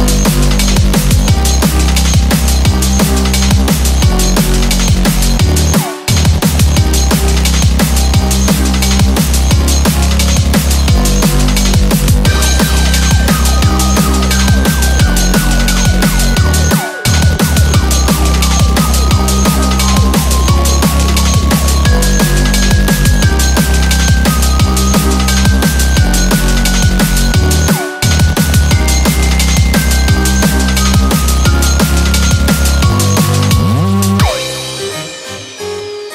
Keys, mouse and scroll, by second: 2.4 click, 3.0-3.4 scroll up 6, 3.4-4.1 scroll down 12, 4.1 scroll up 2, 5.0 click, 6.3 KP_0, 7.5 BackSpace, 7.6 BackSpace, 8.3 KP_0, 10.8-11.9 scroll down 2, 11.3 click, 12.3 click, 13.5 click, 13.7 click, 14.1 click, 14.4 click, 15.2-15.6 scroll down 2, 16.1 click, 16.8 click, 17.5 click, 18.0 click, 18.3 scroll down 5, 18.7 click, 19.9-20.2 scroll down 2, 20.5 click, 21.8 click, 24.5 scroll up 2, 24.7 scroll down 1, 24.9 scroll down 4, 25.1-25.6 scroll up 2, 25.6 shift+middle click, 25.9 scroll up 2, 26.3 shift+middle click, 27.2 scroll down 3, 27.7 click, 28.0 click, 28.5 click, 29.0 click, 29.4 scroll up 4, 30.2 click, 32.5 click.